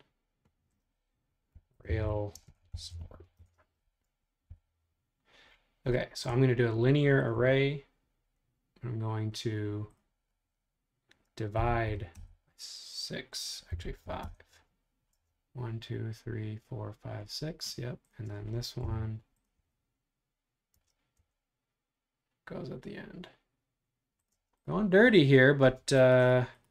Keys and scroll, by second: 1.4-4.6 typing, 11.3-12.4 typing, 13.5-15.1 typing, 18.9 m, 24.4 space, 25.7 space.